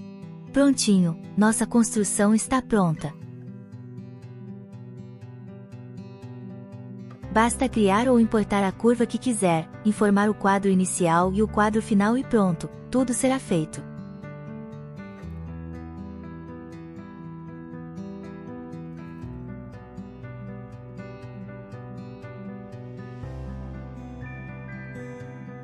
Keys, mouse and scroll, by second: 7.1 shift+Left, 16.4 click, 18.7 Tab, 19.1 Tab, 20.2 click, 22.3 a, 25.0 click.